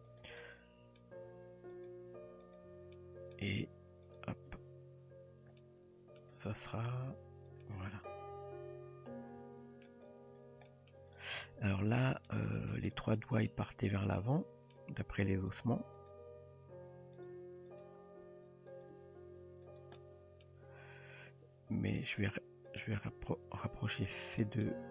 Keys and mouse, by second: 0.4-1.0 middle drag, 1.3 g, 3.0-3.3 middle drag, 3.6 g, 4.5 Tab, 5.6-6.2 middle drag, 7.6-9.9 middle drag, 10.7 shift+middle drag, 11.5 Tab, 12.3-12.9 middle drag, 13.5-14.7 middle drag, 15.6 drag, 16.0 click, 16.5 r, 17.8 click, 18.2 r, 18.9 g, 20.0 middle click, 22.0 click, 22.8 click, 23.3 g, 24.7 middle click.